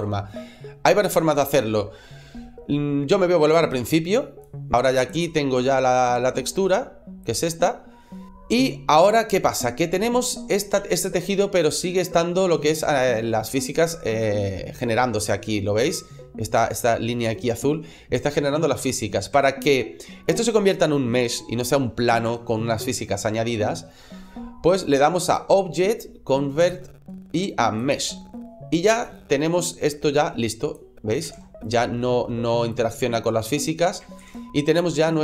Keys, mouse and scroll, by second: 3.0 click, 4.8 click, 8.0 middle click, 8.3 shift+middle click, 8.3 scroll up 1, 8.7 scroll down 1, 10.1 scroll up 2, 10.7 shift+middle click, 11.1 scroll up 1, 11.6 middle click, 12.7 shift+middle click, 13.3-13.6 scroll down 2, 13.9 middle click, 18.3 shift+middle click, 18.8 middle click, 19.3 shift+middle click, 19.8 shift+middle click, 25.1 click, 28.9 right click, 30.2 click, 31.2 ctrl+z, 31.5 right click, 32.5 click, 34.1 ctrl+z, 34.5-35.0 scroll down 2, 35.0 middle click.